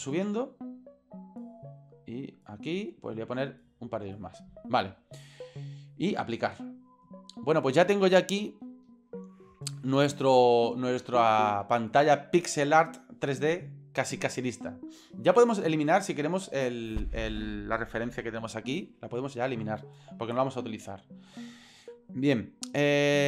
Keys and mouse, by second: 2.5 click, 3.5 click, 3.6 click, 6.6-7.1 drag, 8.4-8.9 shift+middle drag, 11.1-11.8 shift+middle drag, 16.2 middle click, 16.9-19.0 right drag.